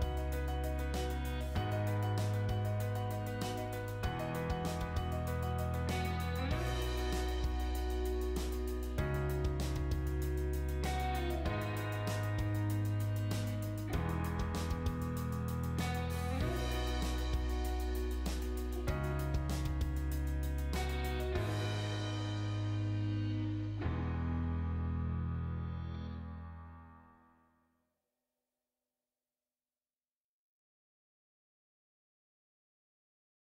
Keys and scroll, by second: 1.6 Escape, 7.2 Escape.